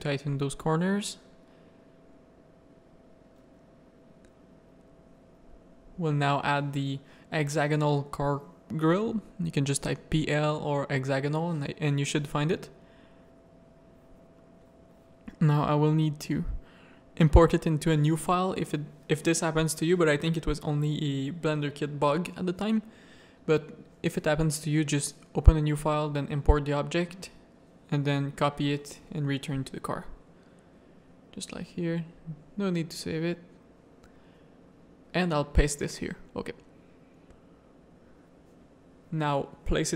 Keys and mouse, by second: 1.1 Tab, 1.4 alt+a, 1.8 middle click, 2.9 middle click, 3.9 ctrl+KP_1, 4.6 shift+middle click, 6.5-9.3 drag, 8.1 l, 11.9 click, 13.0 x, 14.5 click, 15.4 ctrl+s, 16.7-18.3 drag, 20.0-22.8 drag, 21.6 l, 25.5 click, 26.0-27.0 drag, 35.2 ctrl+v, 36.2 r, 38.7 g.